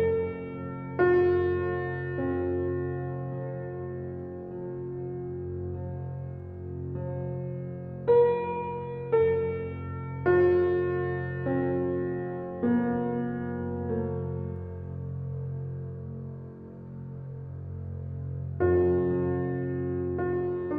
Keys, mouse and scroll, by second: 0.8 click, 2.2-2.9 drag, 3.5 g, 6.4 click, 6.8-7.7 middle drag, 7.7 click, 8.3 alt+middle click, 9.6 shift+d, 12.7 g, 14.0 g, 16.8-17.9 middle drag, 17.9 g, 19.4 click.